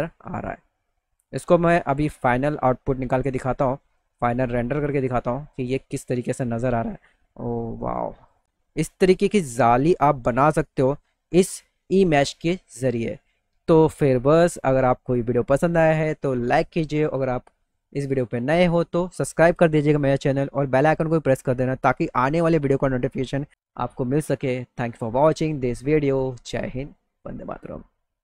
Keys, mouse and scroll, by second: 1.1 alt+middle click, 1.9 middle click, 2.6 middle click, 3.4 middle click, 3.8-5.1 middle drag, 5.5 middle click, 6.4 middle click, 7.0 middle click, 7.7 middle click, 8.9 alt+middle click, 10.0 middle click, 10.5 alt+middle click, 11.5 middle click, 12.5 middle click, 12.9 middle click, 13.2 middle click, 13.6 middle click, 14.7 middle click, 15.1 alt+middle click.